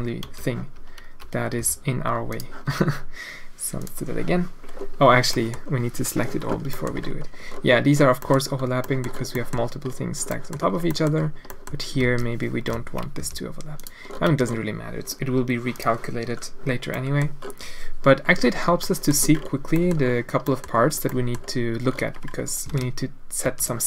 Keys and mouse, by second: 1.6 t, 2.3 click, 2.6 a, 3.9 click, 5.3 click, 6.7 click, 8.2 middle click, 8.9 middle click, 9.0 drag, 9.4 middle click, 10.4 middle click, 10.5 click, 11.0 click, 11.5 click, 12.0 alt+a, 12.7 l, 13.2 g, 14.3 a, 15.9 click, 17.0 middle click, 18.9 middle click, 19.8 middle click, 20.5 click, 21.2 middle drag, 22.7 alt+a, 23.4 b.